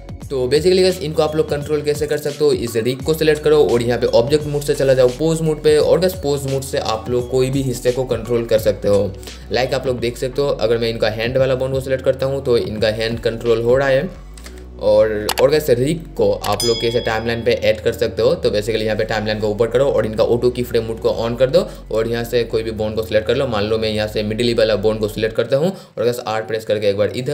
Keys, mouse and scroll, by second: 0.4-5.0 drag, 9.2-9.6 scroll up 1, 9.9 click, 11.6 r, 13.8 click, 14.5 ctrl+z, 16.1-17.4 drag, 26.1 r, 27.1 click.